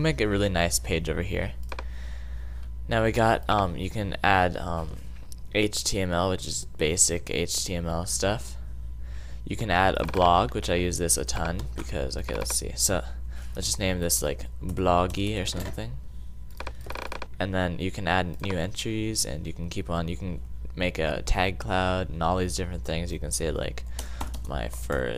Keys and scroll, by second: 13.3-15.9 typing, 23.6-25.1 typing.